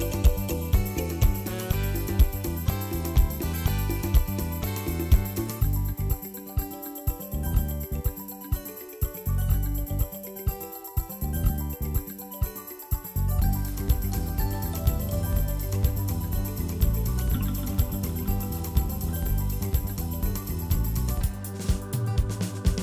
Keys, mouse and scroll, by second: 0.1-1.1 drag, 1.4-2.0 scroll down 1, 2.0 ctrl+s, 2.3-4.6 shift+middle drag, 4.6-5.6 scroll up 2, 6.1-8.3 drag, 11.9-13.1 drag, 15.3-15.9 scroll down 1, 15.9 scroll up 1, 16.1-16.4 scroll down 3, 16.4 click, 17.1 click, 17.4 KP_0, 17.9 scroll up 1, 18.4 ctrl+s, 18.5 scroll up 3, 18.8 scroll down 2, 19.0 shift+middle click, 19.6 shift+click, 20.6 click, 22.3-22.8 scroll up 7.